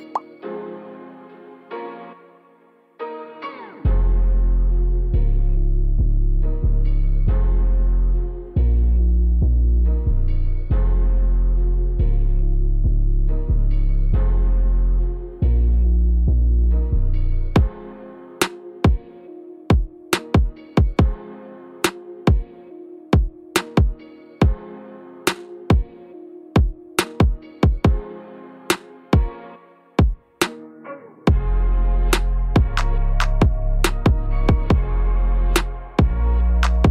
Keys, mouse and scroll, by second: 0.5 Tab, 0.7 click, 1.0 shift+s, 1.4-1.9 scroll down 2, 1.5 middle click, 2.0 middle click, 2.4 scroll up 4, 2.6 middle click, 3.2-3.6 scroll down 10, 3.6-4.1 scroll up 7, 4.1 middle click, 4.9 scroll up 1, 5.1 middle click, 5.6 scroll down 4, 5.7 middle click, 6.2 KP_3, 6.6 scroll up 1, 8.1 click, 10.0 alt+z, 10.5 click, 12.6 shift+d, 14.3 r, 19.0-19.5 scroll down 1, 19.5 middle click, 20.1-20.5 scroll up 2, 20.5 shift+middle click, 21.6 click, 25.5 click, 26.6 scroll down 1, 27.0-28.1 scroll up 1, 28.1 click, 29.3 click, 35.3 KP_1, 36.5 KP_3.